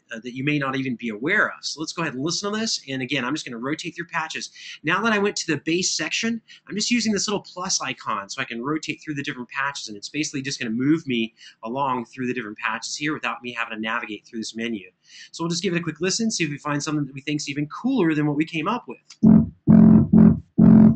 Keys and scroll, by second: 18.9 space.